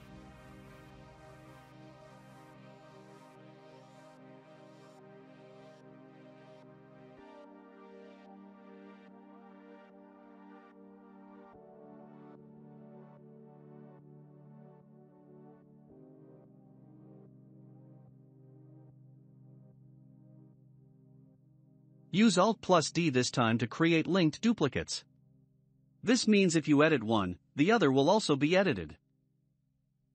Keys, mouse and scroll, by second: 2.3-3.7 shift+middle drag, 3.7 click, 6.8-7.2 scroll up 2, 7.2-8.2 middle drag, 8.2 s, 11.2 s, 13.6-14.5 shift+middle drag, 14.5-14.8 scroll up 3, 14.8-16.3 middle drag, 16.3 click, 19.9-21.1 middle drag, 21.1 ctrl+a, 22.5-22.9 middle drag, 22.9-23.2 scroll up 1, 23.3-24.4 shift+middle drag, 24.4 alt+d, 27.5 r.